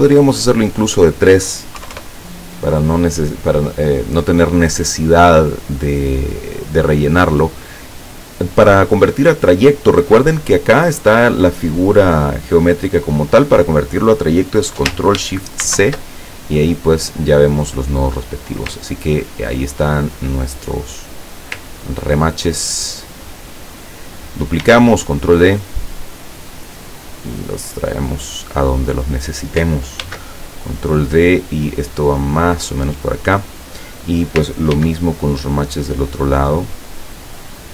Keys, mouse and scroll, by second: 0.8 click, 1.8 KP_3, 2.0 KP_Enter, 4.0 click, 15.7 ctrl+shift+c, 16.9 click, 18.2 click, 19.0-19.6 ctrl+scroll up 2, 20.0-21.6 ctrl+drag, 24.7 ctrl+d, 25.7-28.7 drag, 30.0 ctrl+d, 30.6-32.8 ctrl+drag, 34.8 ctrl+d, 35.7-37.7 drag.